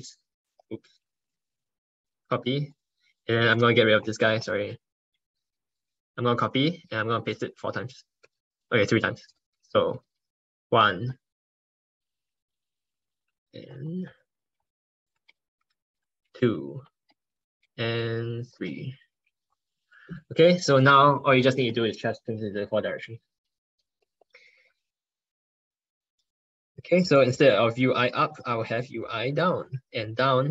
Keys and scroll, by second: 2.2 ctrl+c, 6.7 ctrl+v, 7.4 ctrl+z, 8.1 ctrl+c, 9.8 ctrl+BackSpace, 10.4 ctrl+v, 11.2 ctrl+BackSpace, 11.6 ctrl+z, 13.0 ctrl+z, 15.2 ctrl+BackSpace, 16.2 ctrl+v, 17.5 ctrl+BackSpace, 18.4 ctrl+c, 19.0 ctrl+v, 23.9 ctrl+Right, 24.1 ctrl+Right, 25.4 ctrl+BackSpace.